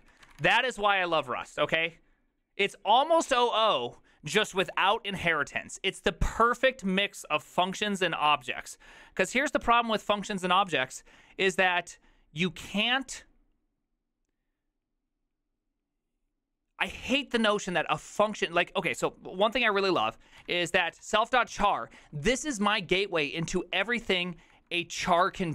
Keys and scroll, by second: 0.0 ctrl+c, 0.0-0.9 typing, 20.9-22.0 typing.